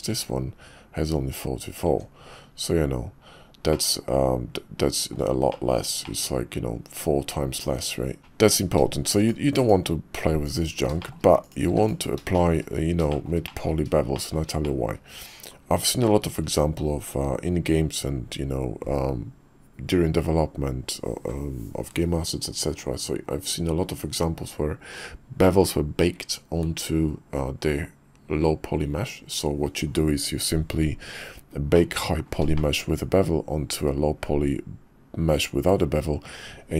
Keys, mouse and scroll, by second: 0.1 Tab, 1.9 Tab, 3.7-5.1 middle drag, 5.5 shift+middle click, 6.0-8.5 middle drag, 9.2 click, 9.5 x, 11.0 shift+middle click, 11.7 x, 12.3 shift+click, 13.1 shift+click, 13.5 drag, 14.1 shift+middle drag, 14.6 middle drag, 16.1 shift+middle click, 31.7 middle click, 32.5 shift+drag.